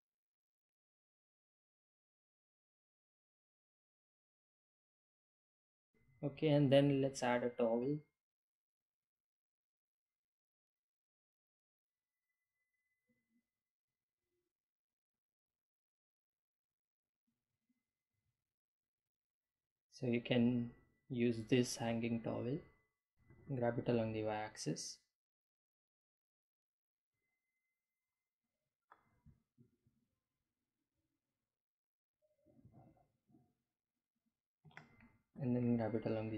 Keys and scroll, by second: 0.5-3.8 typing, 1.2 Home, 2.3 Delete, 5.8 t, 5.8 w, 6.3 Return, 23.9 Home, 25.1 g, 25.2 y, 28.7 Delete, 33.8 g, 34.0 y.